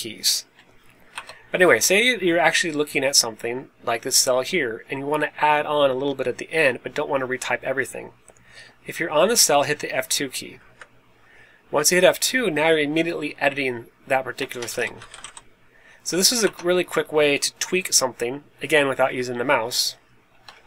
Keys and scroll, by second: 1.1 Return, 10.5 F2, 14.3-15.6 typing, 19.6 F2, 20.2-20.6 typing.